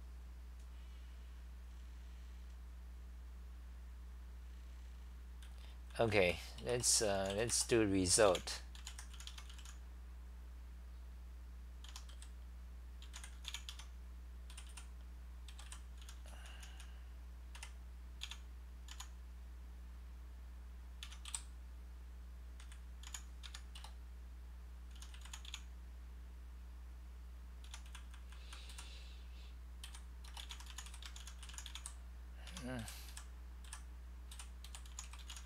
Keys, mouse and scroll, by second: 6.3-7.7 typing, 9.3 Home, 9.4-10.2 typing, 11.9 u, 13.7 Home, 14.5-18.2 typing, 20.8-23.1 typing, 27.7-29.9 typing, 32.3-34.7 typing.